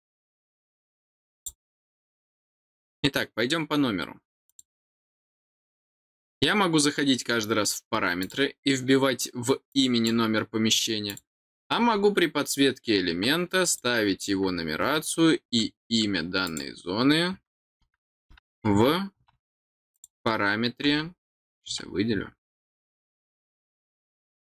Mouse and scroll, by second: 1.3 click, 4.4 click, 8.2 click, 9.7 click, 11.1 click, 13.6 click, 16.4 click, 19.9 click.